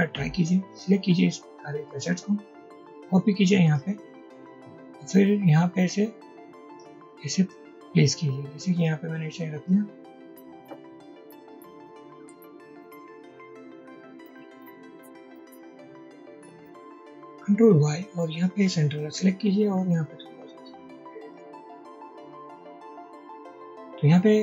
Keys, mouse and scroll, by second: 2.6 alt+click, 3.2 alt+click, 6.4-7.6 alt+drag, 9.8-11.0 alt+drag, 12.0 alt+click, 14.0 drag, 14.8 click, 15.6 click, 17.6 ctrl+y, 19.2 ctrl+y, 20.0 click, 22.2-23.0 drag.